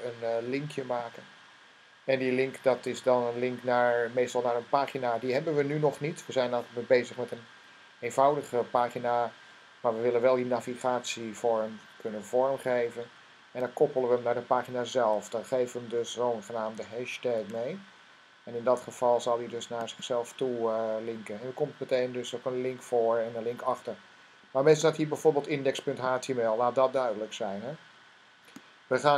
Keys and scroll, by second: 17.1 shift+3.